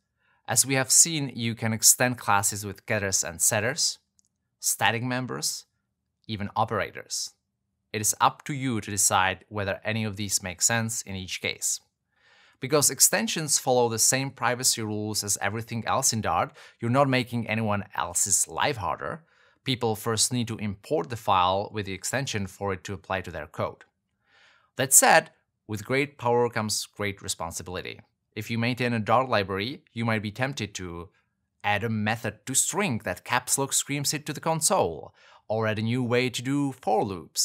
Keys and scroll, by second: 12.1 super+z, 16.2 alt+Return, 19.3 Return, 20.1 super+s.